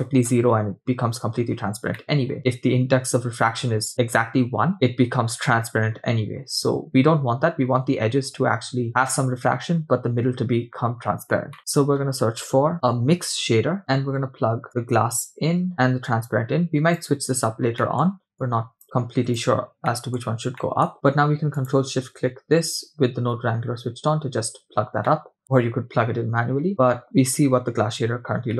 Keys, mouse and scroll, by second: 1.5 scroll up 2, 2.0 middle click, 11.3 scroll down 2, 11.6 middle click, 11.6 shift+a, 14.7-15.7 drag, 16.1-17.1 drag, 17.8 middle click, 18.4-19.4 drag, 19.9 middle click, 20.4 scroll down 1, 20.6 middle click, 20.9 click, 21.9 ctrl+shift+drag, 25.7 middle click, 26.7 middle click, 28.1-28.5 scroll up 3.